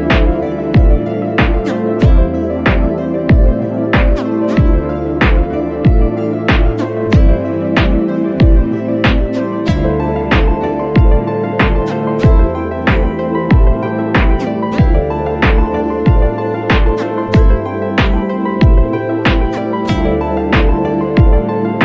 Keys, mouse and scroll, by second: 5.2 click, 8.3 click, 9.8 click, 19.5-21.8 drag.